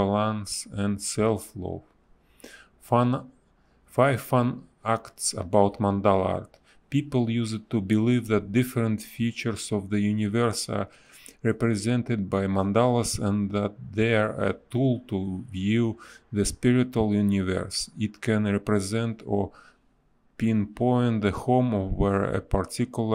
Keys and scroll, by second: 0.0 space, 1.4 ctrl+z, 2.6 ctrl+z, 4.5 space, 6.1 a, 7.5 space, 8.1 b, 10.1 space, 12.7 a, 12.8 space, 16.8 space, 17.4 space, 20.8 v, 21.2 b.